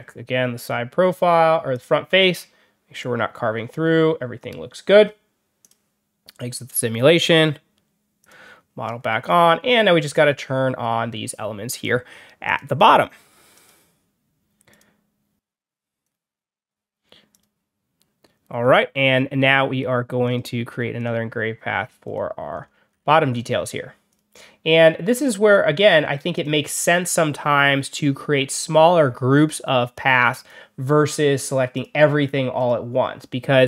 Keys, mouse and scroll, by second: 1.6 click, 5.5 click, 8.1 click, 8.7 scroll down 1, 8.8 middle drag, 9.1 scroll up 2, 12.3 click, 13.4 click, 14.6 click, 15.9 click, 17.2 click, 20.1 click, 20.9 click, 21.9 click, 22.4-22.7 scroll up 2, 22.8 scroll down 2, 23.2 middle click, 24.0 click, 25.1 click, 26.2 click, 30.3 click, 31.6 click, 32.5 click.